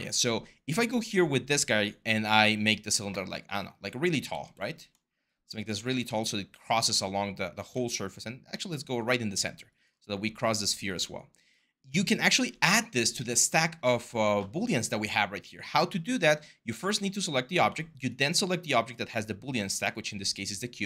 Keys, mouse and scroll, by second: 2.0 r, 4.1 ctrl+z, 5.5 ctrl+z, 6.6 w.